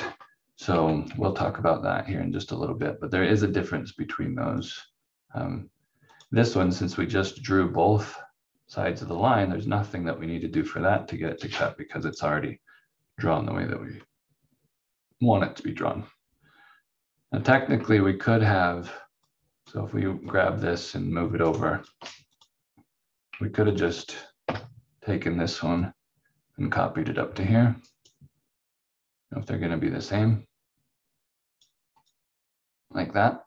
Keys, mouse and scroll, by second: 0.7 v, 1.3 click, 4.6 click, 11.3 click, 17.0-18.4 scroll down 1, 18.5 click, 21.4 ctrl+right click, 22.8-23.7 scroll up 1, 23.7 click, 24.4 Delete, 25.8 click, 27.9 right click.